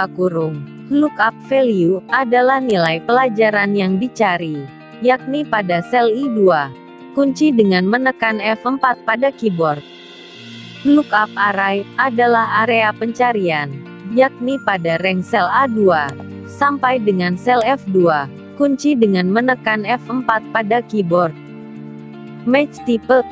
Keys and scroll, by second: 6.9 F4, 18.4 F4.